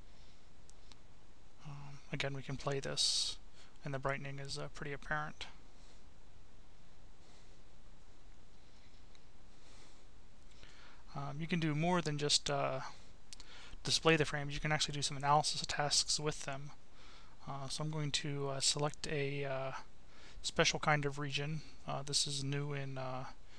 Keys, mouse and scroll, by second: 0.0 click, 3.7 click, 10.1 click, 13.8 click, 15.5 click, 18.5 Delete, 22.1 click, 23.5 click.